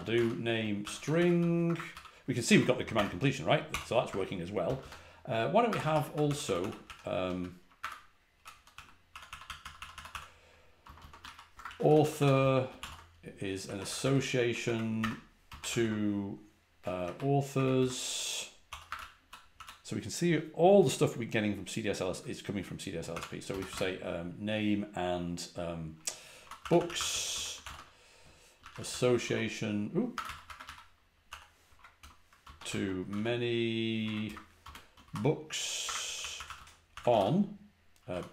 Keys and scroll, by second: 0.0-1.8 typing, 2.8-16.9 typing, 7.7 Escape, 14.5 Page_Down, 14.9 Return, 17.5 Page_Down, 17.7 Return, 18.3-19.9 typing, 23.0-23.6 typing, 26.1-38.3 typing.